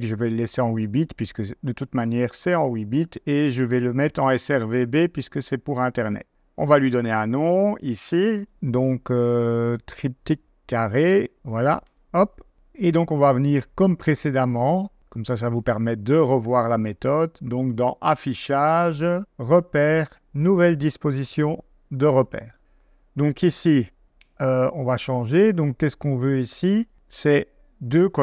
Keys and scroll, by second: 9.7-11.8 typing, 11.9 Return.